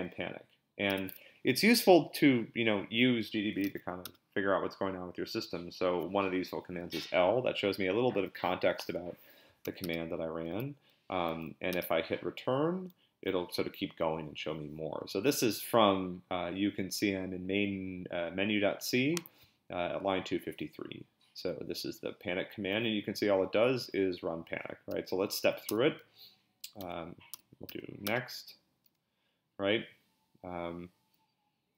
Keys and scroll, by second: 0.9 BackSpace, 3.6 l, 4.0 Return, 9.6 l, 9.8 Return, 11.7 Return, 25.2 s, 25.7 BackSpace, 26.8 b, 27.3 BackSpace, 27.7 n, 28.0 Return.